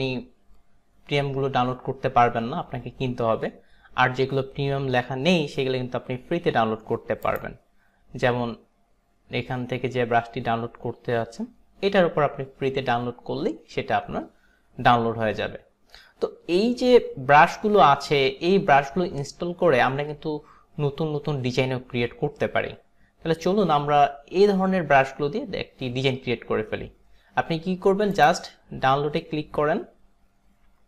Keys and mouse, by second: 7.3 click, 28.3 click.